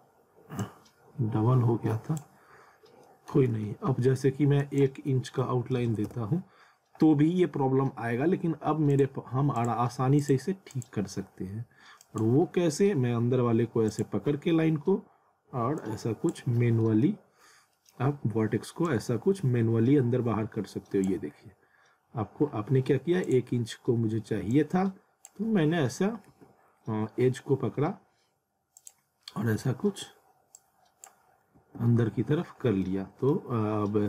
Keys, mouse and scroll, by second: 0.6 click, 2.8 scroll up 1, 3.0 middle click, 3.5 ctrl+z, 4.6 click, 5.9 shift+', 6.1 Return, 8.9 click, 12.4 scroll up 1, 13.9 click, 14.2 z, 14.7-15.2 scroll up 1, 15.8 click, 16.5 scroll down 1, 16.8 middle click, 17.3-17.7 scroll up 1, 17.7 middle click, 18.9 click, 21.1 z, 22.5-22.9 scroll up 1, 23.3 click, 23.6-24.0 scroll up 1, 24.5 click, 25.5-25.9 scroll down 1, 26.3 z, 27.2 scroll up 1, 28.2-28.6 scroll up 1, 28.8 click, 29.2 scroll up 1, 30.5 click, 31.2 scroll down 1, 31.6 z, 32.4-32.8 scroll up 1, 32.8 middle click.